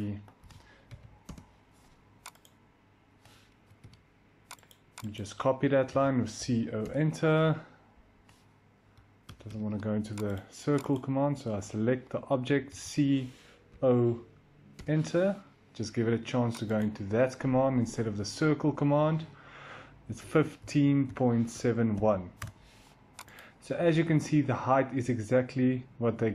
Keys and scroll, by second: 0.0-0.8 typing, 1.1 Return, 3.4 Escape, 3.6 Escape, 3.7-4.5 typing, 5.8-6.3 typing, 6.7 Return, 9.1 Escape, 9.3 typing, 12.3-14.1 typing, 14.6 Return, 19.8-21.9 typing, 22.3 Return, 24.5-26.3 typing.